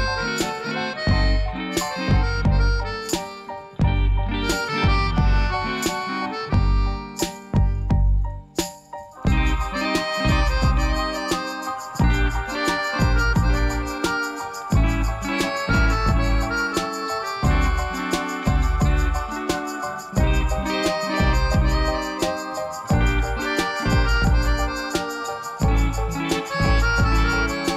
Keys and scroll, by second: 0.2 alt+a, 1.3 k, 3.4 Return, 4.4 k, 6.0 Return, 17.1 shift+d, 17.3 z, 23.4 s.